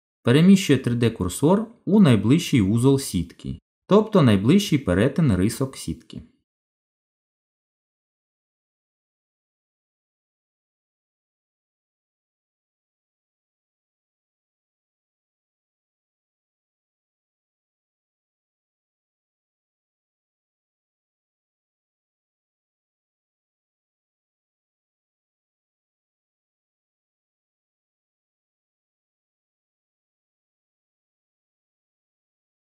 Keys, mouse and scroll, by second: 3.4 click, 7.2 shift+s, 13.8 middle click, 14.8-16.0 scroll down 11, 16.0 middle click, 19.9 shift+s, 24.6 middle click, 27.4 shift+s, 29.5 middle click, 31.9 click, 32.5 middle click.